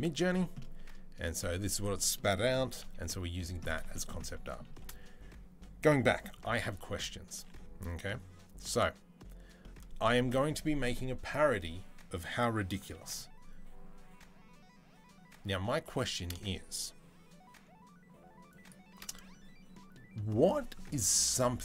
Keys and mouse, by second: 2.6 KP_3, 7.1 b, 15.7 i, 18.5-21.6 middle drag.